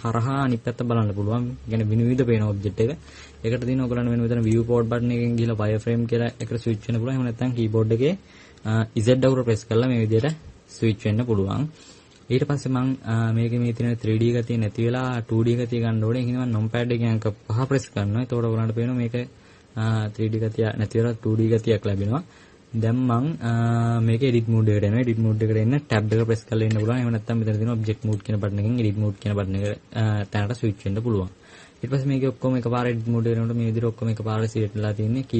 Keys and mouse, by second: 9.3 z, 10.3 z, 17.7 KP_5, 19.1 KP_5, 19.5 KP_5, 28.1 click, 29.8-35.3 drag.